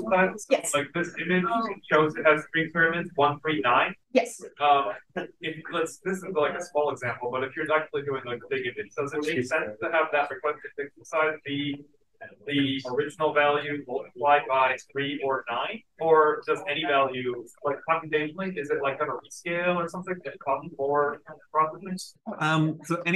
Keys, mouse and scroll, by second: 7.5 click.